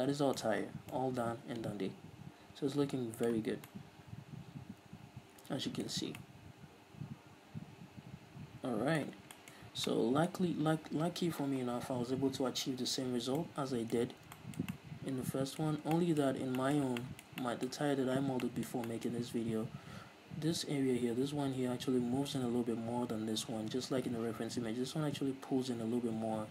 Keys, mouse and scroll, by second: 1.0 scroll up 2, 3.2-23.3 middle drag, 3.9 scroll down 2, 6.2-6.6 scroll up 2, 9.5 scroll down 2, 10.0 scroll up 2, 16.0-17.0 scroll up 4.